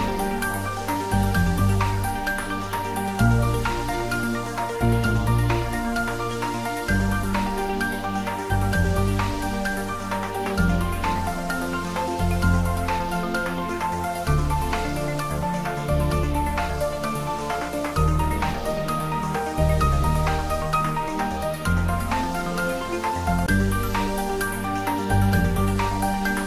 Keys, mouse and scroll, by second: 1.2 click, 2.3-2.7 scroll up 1, 4.3-4.9 scroll up 1, 6.5-7.7 scroll down 1, 10.3-11.7 typing, 12.7 click, 13.4-14.8 typing, 16.2 click, 18.5 click, 21.0-22.9 scroll down 1, 23.6 scroll up 1, 25.4-26.4 drag.